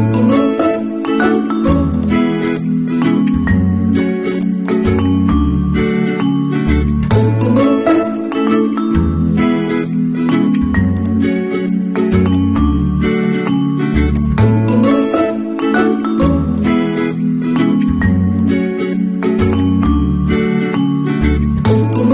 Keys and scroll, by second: 3.6 Delete, 7.3 ctrl+d.